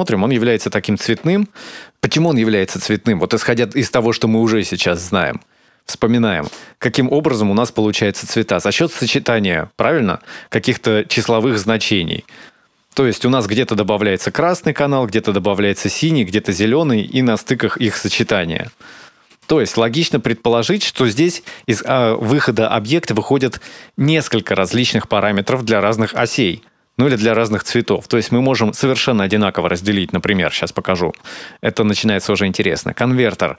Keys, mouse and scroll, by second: 5.6 click, 13.4 middle click, 15.4 middle click, 17.2 middle click, 17.5 middle click, 18.9 middle click, 21.2 click, 21.6 click, 28.8 shift+a.